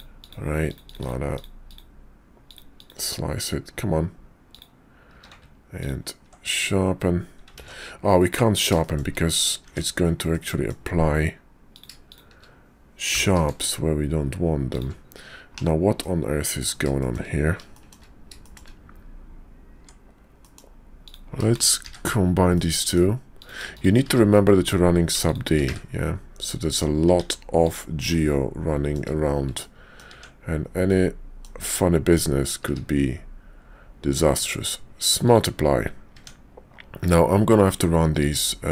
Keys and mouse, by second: 4.5 click, 5.1 q, 8.0 ctrl+z, 8.8 shift+click, 9.6 Tab, 10.3 click, 11.7 click, 12.1 shift+click, 13.1 g, 15.5 /, 16.0 click, 17.0 shift+click, 17.7 shift+click, 18.4 shift+click, 19.7 Tab, 20.4 click, 21.0 click, 21.5 shift+click, 21.8 1, 22.5 click, 23.3 click, 23.7 shift+click, 24.0 1, 25.2 shift+click, 25.6 1, 26.5 click, 27.1 Tab, 27.6-28.9 drag, 29.6 click, 30.2 Tab, 30.9 click, 32.6 q, 36.1 Tab, 38.2 q.